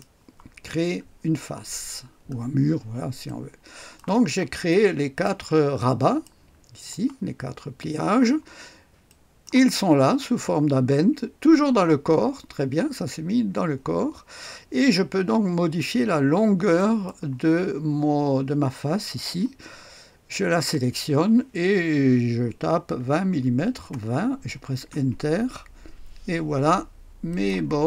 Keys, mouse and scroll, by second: 1.0-3.0 scroll down 2, 3.2-4.4 drag, 4.6 click, 5.2 right click, 5.4-6.1 scroll down 1, 6.1 right click, 7.2-7.8 scroll up 1, 7.8-8.5 scroll down 1, 9.0 click, 16.7 click, 22.9 KP_2, 23.8 KP_0, 24.8 Return, 27.2 click.